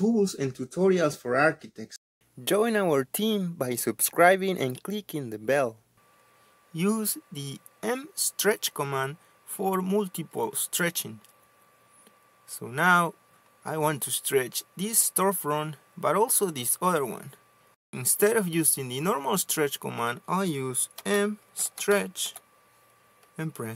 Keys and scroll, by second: 21.3-23.3 typing.